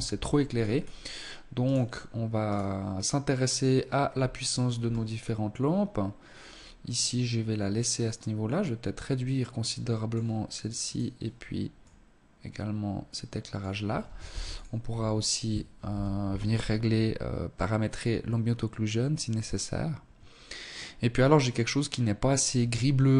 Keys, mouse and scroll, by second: 0.7 right click, 1.5 right click, 3.1-3.4 scroll down 2, 3.7-4.1 scroll up 4, 5.9 right click, 7.1 click, 9.9 right click, 10.8 click, 13.4 ctrl+s, 13.9-14.3 scroll up 3.